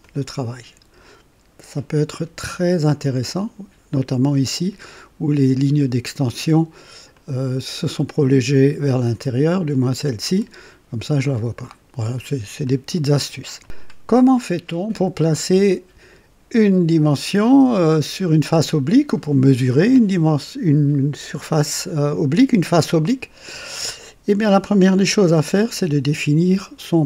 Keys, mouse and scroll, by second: 0.0-4.5 drag, 7.1 click, 8.9 click, 10.4-12.3 drag, 12.6 click, 14.1 scroll up 1, 15.0 scroll up 1, 15.7-16.4 right drag.